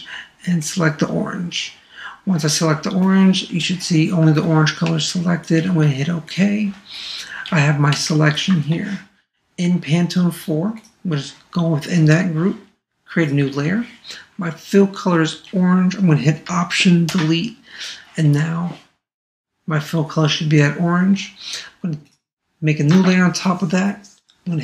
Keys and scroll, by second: 17.1 alt+BackSpace.